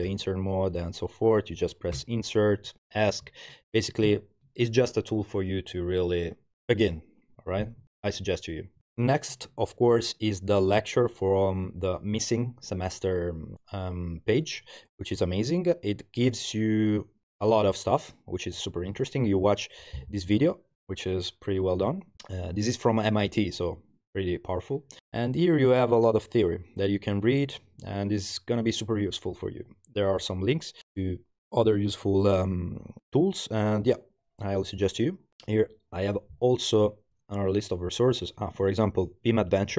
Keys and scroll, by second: 0.1 Return, 2.0 i, 3.3 Escape, 4.1 Return.